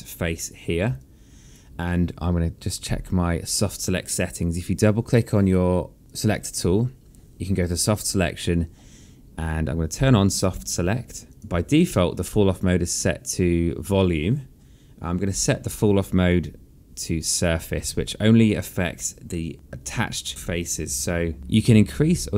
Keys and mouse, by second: 0.4 click, 1.7 alt+click, 6.6 click, 8.6 click, 11.0 click, 11.3 click, 16.7 click, 17.9 click, 20.1 b, 20.8 click, 21.4 b.